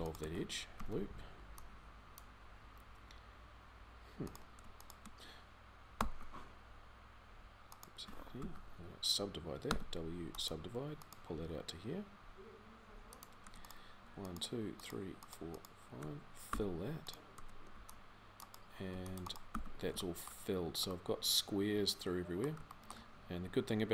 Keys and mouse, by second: 0.6 x, 5.8 e, 8.2 ctrl+z, 9.5 w, 11.1 g, 16.3 f, 17.5 c, 18.7 c, 19.3 f.